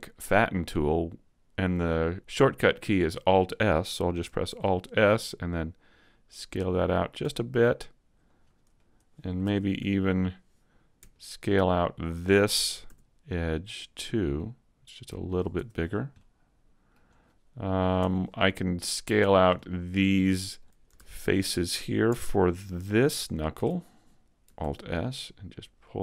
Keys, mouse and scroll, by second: 4.5 alt+s, 7.0 click, 7.2 a, 7.6 middle click, 8.8 middle click, 9.4 ctrl+Tab, 11.1 alt+right click, 11.5 middle click, 14.3 s, 15.4 click, 15.6 Tab, 15.8-16.2 scroll down 3, 16.2 middle click, 17.1-18.0 scroll up 2, 18.0 Tab, 18.3 middle click, 19.2-19.9 scroll up 2, 19.6 shift+middle click, 20.2 middle click, 21.0 ctrl+Tab, 22.4 alt+right click, 23.2 alt+shift+right click, 24.6 alt+s.